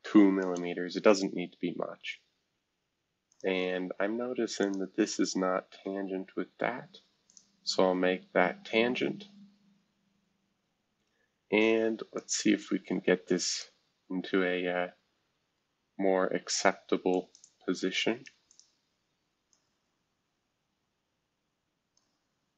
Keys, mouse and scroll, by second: 0.4 Return, 2.1-3.1 scroll down 2, 3.1 scroll down 1, 3.3 click, 4.6 shift+click, 7.2 click, 8.5-9.1 scroll down 4, 9.5 scroll up 1, 10.6 scroll down 1, 12.1-13.6 drag, 14.0 scroll down 1, 14.9 scroll down 1, 17.1 click, 17.4 click, 18.5 click, 19.5-22.0 drag, 22.3-22.5 scroll down 2.